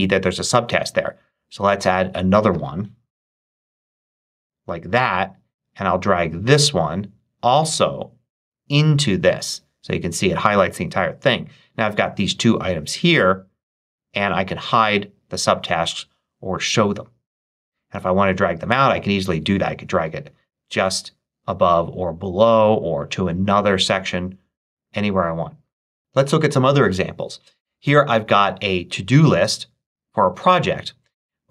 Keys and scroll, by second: 2.7-4.0 typing.